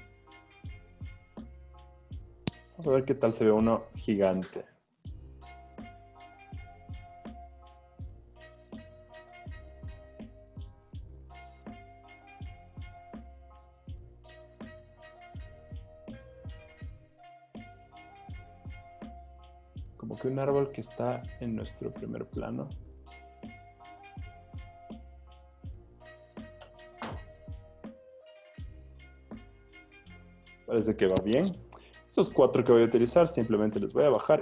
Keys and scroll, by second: 2.6 super+t, 19.0 Return, 28.7 z, 29.8 z.